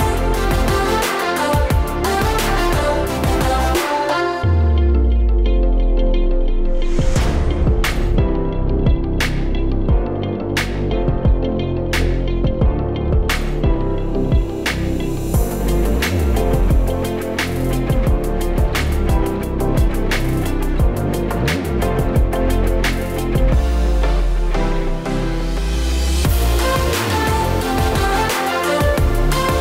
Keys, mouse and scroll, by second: 0.1 s, 1.1 middle click, 2.1 click, 2.4 middle click, 3.0 click, 3.3 click, 4.0 click, 4.2 click, 4.9 click, 5.4 click, 5.9 click, 6.2 click, 6.8 click, 7.0 click, 8.0 click, 8.3 click, 8.9 middle click, 9.7 click, 9.9 middle click, 10.3 click, 11.0 middle click, 11.6 click, 12.8 scroll up 4, 13.0 click, 13.7 click, 13.9 click, 14.8 click, 15.8 click, 16.2 middle click, 16.9 click, 17.2-17.8 scroll down 4, 18.0 right click, 18.4 click, 19.5 ctrl+z, 19.8 click, 21.4 KP_1, 22.2 click, 22.4-23.1 scroll up 5, 22.6 shift+middle click, 23.3 Tab, 23.7 click, 24.2 b, 24.9 a, 25.0 a, 25.6 b, 26.6 Delete, 27.1-27.7 scroll down 4, 27.7 b, 28.2 shift+middle click, 28.4-28.8 scroll up 6, 28.7 shift+middle click, 28.9 shift+middle click, 29.2 b.